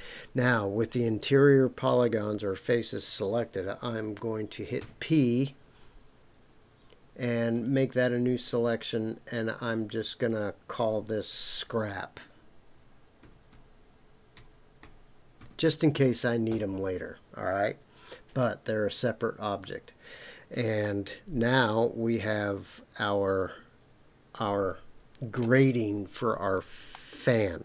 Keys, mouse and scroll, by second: 4.8 p, 10.1 click, 10.3-17.2 drag, 19.6 click, 20.8-25.4 middle drag, 26.9-27.6 middle drag.